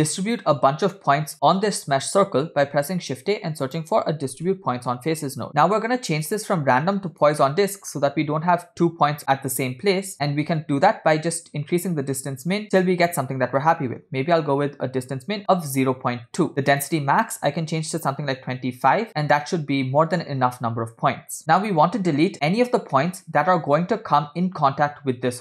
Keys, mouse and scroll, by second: 2.8 shift+a, 5.5 click, 5.8 scroll up 2, 6.2-7.3 drag, 8.0 scroll up 2, 10.6-12.6 shift+drag, 12.7-16.4 shift+drag, 16.7-18.5 drag, 19.1 scroll down 3, 20.2-21.4 middle drag, 23.0-23.7 middle drag.